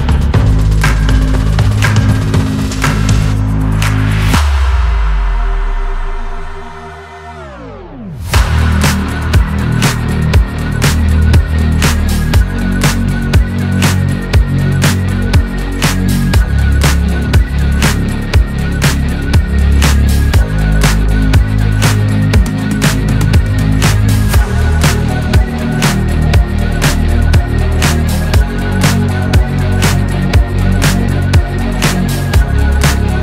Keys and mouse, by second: 2.3 click, 18.7 ctrl+shift+click, 21.4 click, 21.8 click, 32.5 click.